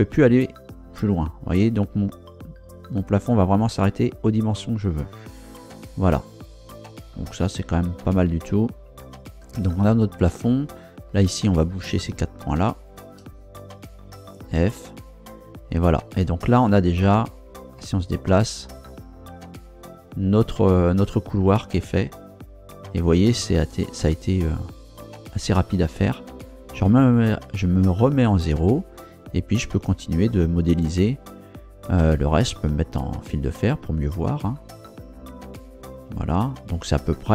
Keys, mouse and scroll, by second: 4.8 click, 10.7 right click, 11.3 shift+right click, 12.2 shift+right click, 12.8 shift+right click, 13.7 f, 16.1 Tab, 17.3 scroll down 2, 17.8 middle click, 17.9-20.1 drag, 20.1-26.2 middle drag, 26.7 KP_0, 28.1-29.1 scroll up 1, 29.1 scroll up 1, 29.8 scroll down 2, 32.7 z.